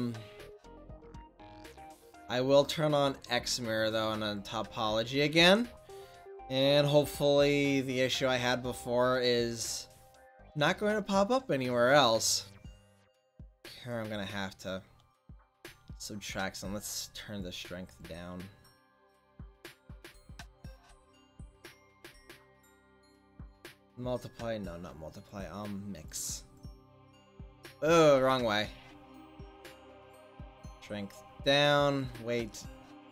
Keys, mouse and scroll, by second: 5.0-13.9 drag, 17.8-24.0 drag, 28.3 ctrl+z, 31.2-33.1 drag.